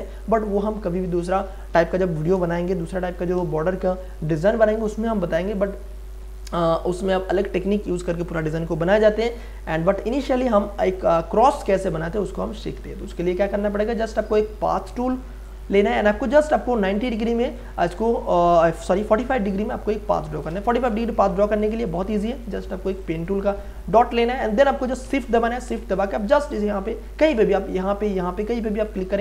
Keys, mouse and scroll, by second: 2.4 space, 2.8-6.0 ctrl+drag, 6.0 Return, 9.9 Delete, 12.8 p, 14.0 click, 20.9 Delete, 22.9 click, 22.9 click, 28.9 shift+click.